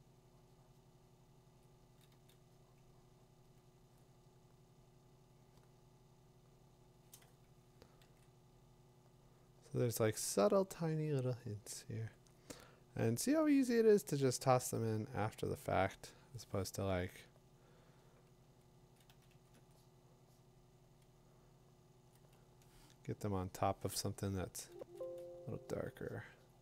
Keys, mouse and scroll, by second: 2.5 click, 2.5 [, 8.0 ctrl+z, 19.0 click, 22.1 click, 23.5 click, 24.8 2.